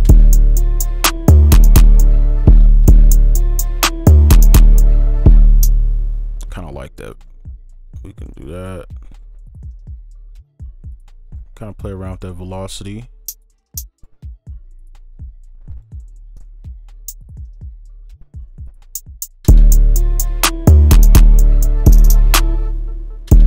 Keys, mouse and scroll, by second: 0.0 right click, 1.5 space, 2.5 space, 3.3 right click, 4.0 double click, 6.6 space, 7.1 ctrl+click, 9.4 double click, 10.7 right click, 11.7 double click, 15.2 ctrl+click, 16.0-16.3 alt+scroll down 2, 16.3 alt+right click, 18.4 right click, 19.2 double click, 22.5 space, 23.3 space.